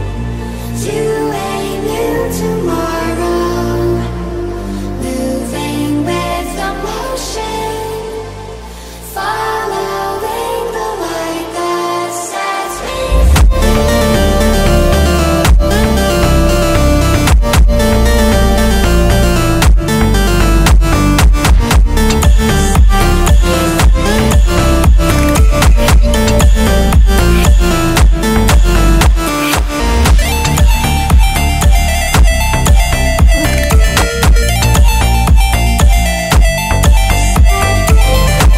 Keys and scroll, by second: 16.3 ctrl+2, 22.2 Delete.